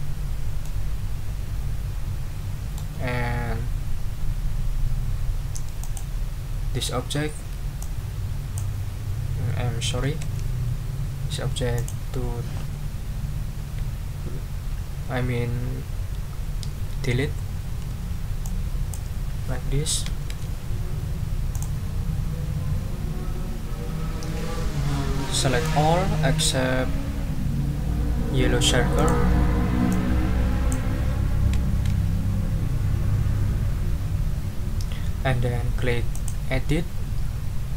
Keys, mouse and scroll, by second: 0.6-1.9 middle drag, 1.9-2.9 drag, 5.8 click, 7.8 click, 10.2 ctrl+z, 11.7 click, 17.9 Delete, 18.4 click, 20.2 ctrl+z, 21.5 click, 25.6-26.6 drag, 28.9 shift+click, 29.9 click, 31.7 ctrl+z, 36.1 click.